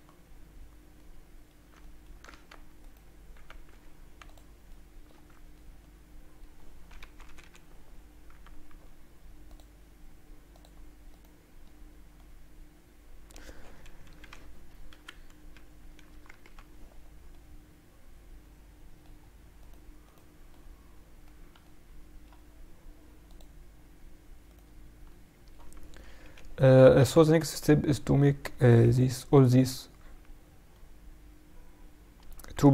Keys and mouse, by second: 0.2-1.9 middle drag, 2.2 Tab, 2.7-4.6 right drag, 3.6 x, 4.6 middle click, 5.0 Tab, 5.9-7.5 middle drag, 6.9 KP_Subtract, 9.4-12.4 drag, 11.0-12.9 right drag, 12.3 middle click, 12.9 middle click, 13.8 KP_Subtract, 13.9 middle click, 14.8 KP_7, 15.3 KP_Subtract, 16.0 KP_Add, 16.4 KP_Add, 17.2 middle click, 18.3 middle click, 18.7 middle click, 19.5-21.7 right drag, 20.5 middle click, 21.7-23.2 middle drag, 23.2-25.2 drag, 24.4 right click, 25.0 middle click, 25.3 right click, 26.0 KP_Subtract, 26.2 middle click, 26.9 KP_7, 27.4 KP_Subtract, 28.0 a, 28.7 b, 30.7 middle click.